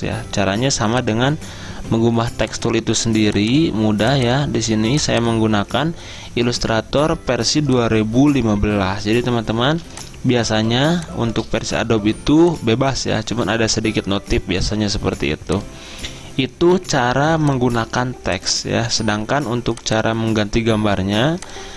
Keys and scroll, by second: 9.7 z.